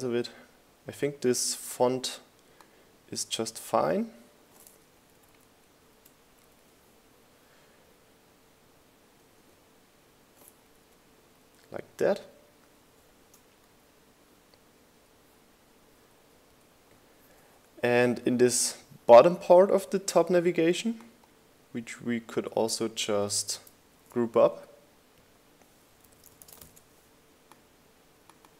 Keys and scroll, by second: 6.1 shift+Up, 7.0 shift+Down, 7.5 Up, 12.5 Down, 14.8 Up, 15.8 Up, 25.2 super+g, 27.1-28.3 typing.